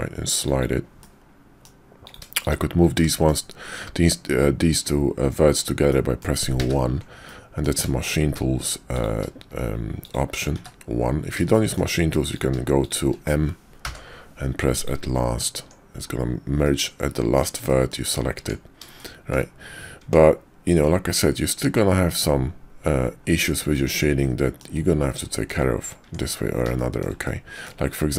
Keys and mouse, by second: 1.0 click, 2.0 click, 2.9 click, 5.9 click, 6.5 1, 7.2 click, 8.0 shift+click, 10.6 1, 11.5 shift+click, 12.3 click, 13.8 m, 15.6 Tab, 16.0-17.4 middle drag, 17.7 shift+middle drag, 17.9 shift+click, 18.4 Tab, 19.0 shift+middle click, 20.0 Tab, 23.7-24.6 middle drag, 25.3 shift+middle drag, 26.0 Tab, 26.7 shift+click, 27.3 click.